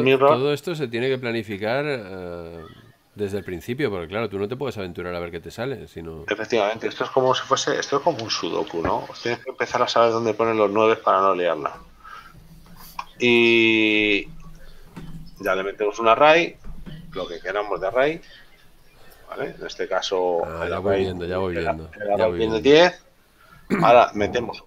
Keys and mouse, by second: 0.6 click, 14.7 click, 18.0 shift+middle click, 21.1 click.